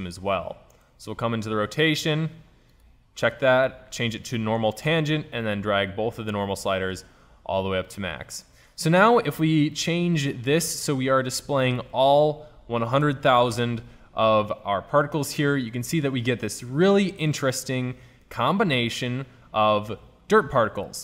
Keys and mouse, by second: 0.5-1.6 drag, 2.2-4.8 drag, 4.8-5.2 middle drag, 5.2 click, 8.6-9.3 middle drag, 11.1 middle click, 11.8-13.3 drag, 13.4 KP_0.